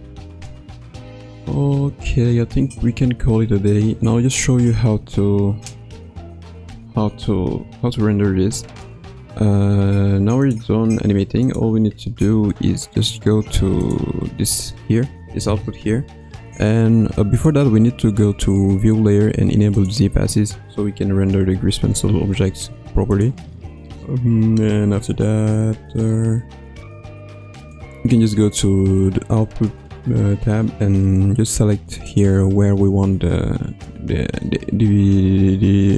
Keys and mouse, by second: 6.6 space, 7.6 ctrl+s, 10.5-11.5 drag, 17.3-19.9 drag, 27.6 click, 32.1 click.